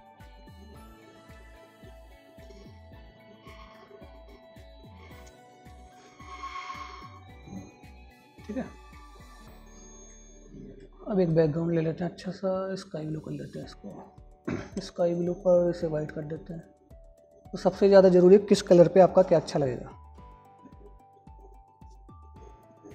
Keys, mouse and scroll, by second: 2.8-8.0 drag, 9.2 click.